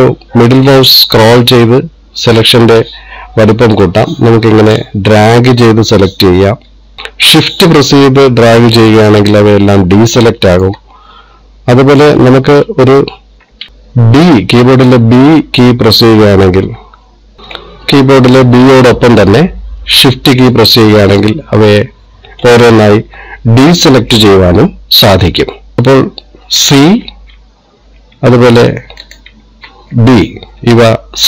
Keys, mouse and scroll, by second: 26.2 scroll down 2, 27.9 c, 30.6 b.